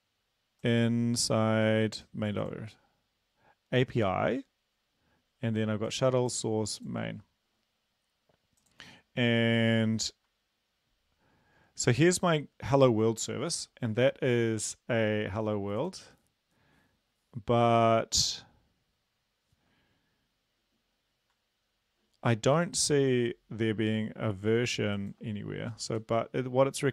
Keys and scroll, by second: 26.0 Return.